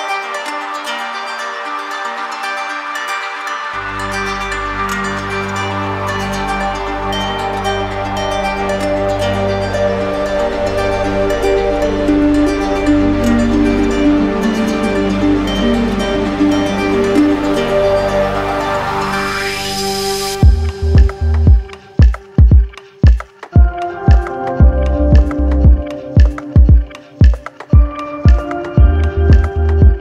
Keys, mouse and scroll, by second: 0.0 ctrl+z, 1.2 right click, 7.8 right click, 8.3 click, 9.6 click, 10.9 ctrl+z, 12.5 click, 13.5 right click, 19.5-20.6 drag, 21.1-22.2 drag, 25.1 click, 25.9 click, 27.1 click, 29.3 click.